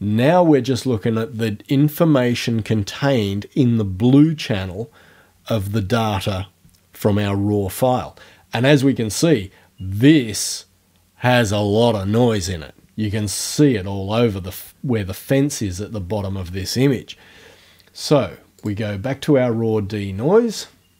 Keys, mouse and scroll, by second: 18.6 click.